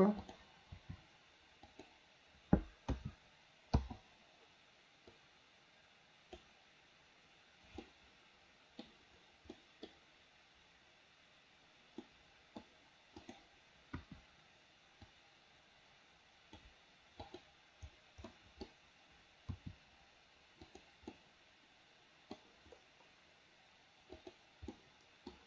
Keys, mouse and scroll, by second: 0.2 click, 0.8 r, 2.9 a, 3.8 i, 5.2-6.4 drag, 7.9-8.9 middle drag, 9.6 middle click, 12.1-12.7 middle drag, 13.2 click, 14.0 KP_1, 15.3-16.7 drag, 17.3 click, 18.3 middle click, 19.6 r, 21.2-22.4 middle drag, 24.2 click, 24.8 middle click.